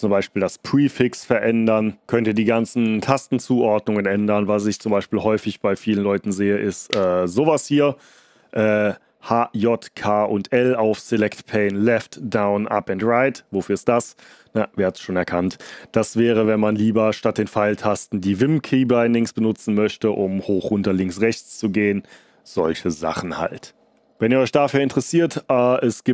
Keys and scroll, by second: 4.7 Insert, 6.8 shift+Insert.